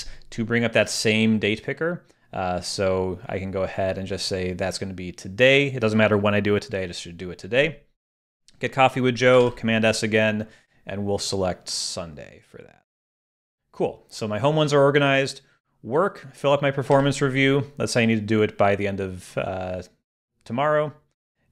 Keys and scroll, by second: 10.4 super+s, 16.9 super+s.